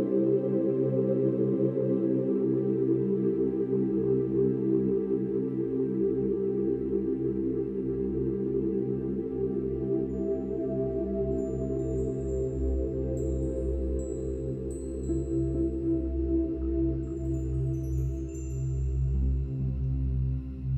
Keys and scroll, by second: 5.3 ctrl+-, 7.8 ctrl+s, 8.4 ctrl+-, 9.8 space, 12.2 space, 18.1 ctrl+h, 20.4 ctrl+alt+shift+n, 20.5 ctrl+alt+g, 20.6 ctrl+d.